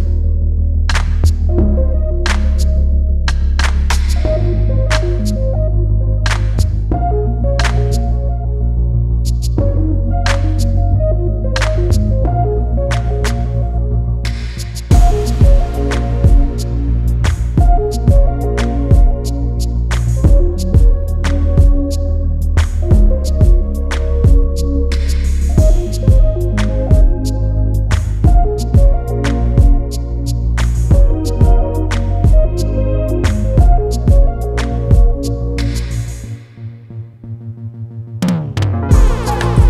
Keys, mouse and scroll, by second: 0.5-0.9 scroll up 1, 0.9 scroll down 1, 1.6 click, 2.6 ctrl+g, 3.2 scroll up 1, 3.8 click, 5.3 click, 10.1 click, 11.9 scroll down 1, 12.4 click, 16.6 click, 19.9 click, 22.5 click, 25.5 scroll up 1, 26.2 click, 27.9 click, 29.1-29.7 scroll down 1, 29.7 click, 32.7 click, 33.0-33.4 scroll down 1, 33.4 click, 33.6 scroll up 1, 36.4 ctrl+s, 36.5 click.